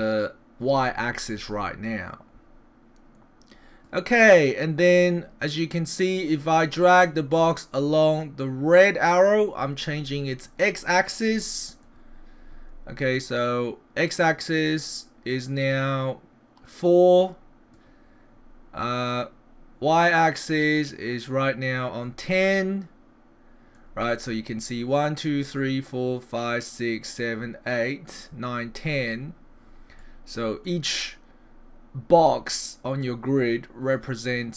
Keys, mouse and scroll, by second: 6.2 click, 8.2 click, 10.4 middle click, 12.1-13.2 scroll down 5, 13.2 click, 20.1 click, 22.3 middle click, 30.0 middle click.